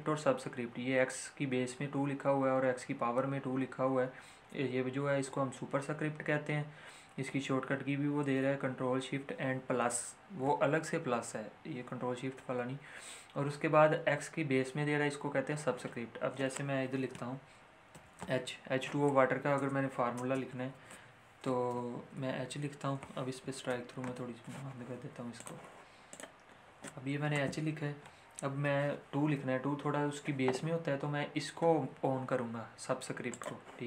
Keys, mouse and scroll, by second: 17.9 Return, 20.0 h, 20.1 space, 21.6 shift+h, 23.7 shift+Left, 25.3 click, 33.3 click, 33.4 click.